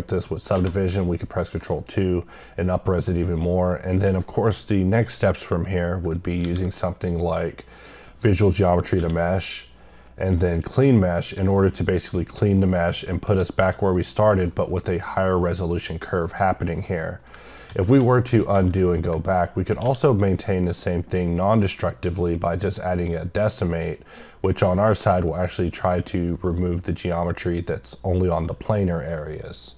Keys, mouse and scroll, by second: 7.8 click, 10.7 click, 14.3 middle click, 16.8 middle click, 17.2 scroll down 1, 23.6 click.